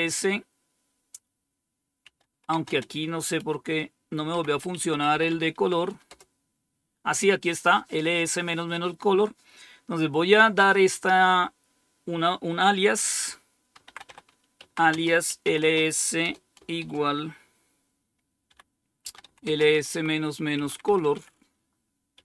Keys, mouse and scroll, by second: 1.9-6.0 typing, 13.5-16.7 typing, 18.4-22.0 typing.